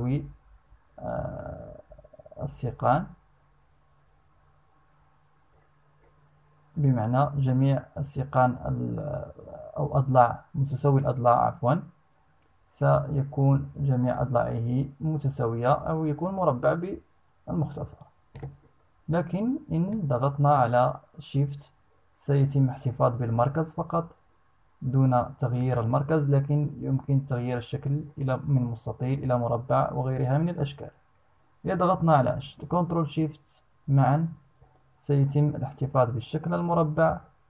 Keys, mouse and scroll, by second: 19.4-37.4 drag.